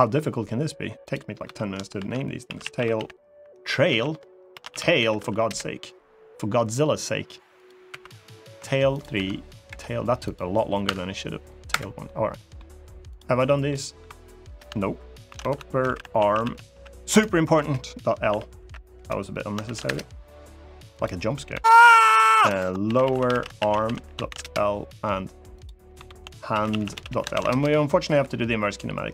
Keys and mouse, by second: 1.2 F2, 7.6 F2, 8.9 F2, 10.6 F2, 11.8 middle click, 12.8 click, 13.2 middle click, 14.5 shift+F2, 15.3 p, 20.7 click, 21.3 F2, 25.7 F2, 27.8 KP_3.